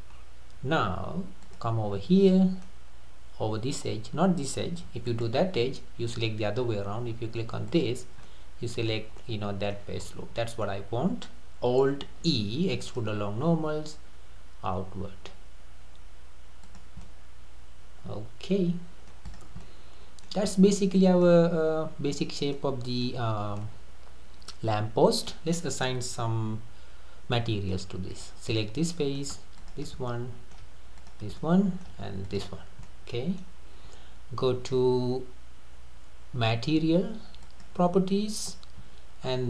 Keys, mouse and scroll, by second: 0.1-0.7 scroll down 2, 1.4 click, 1.9 scroll up 3, 2.3-5.1 middle drag, 5.1 alt+click, 7.7 alt+click, 8.2 scroll up 1, 8.3-8.9 middle drag, 8.9-9.2 scroll down 3, 9.2-10.1 middle drag, 10.1-10.4 scroll down 2, 10.4-12.0 middle drag, 12.0 alt+e, 17.1-19.3 middle drag, 19.3 click, 19.6-20.5 middle drag, 20.5 scroll down 2, 20.8-23.2 middle drag, 23.2-23.6 scroll up 2, 23.6-26.8 middle drag, 27.3-28.1 middle drag, 28.1 click, 28.6-29.6 middle drag, 29.6 shift+drag, 30.1-31.0 middle drag, 31.0 shift+click, 31.4-32.2 middle drag, 32.2 shift+click, 32.8-35.9 middle drag, 37.5 click.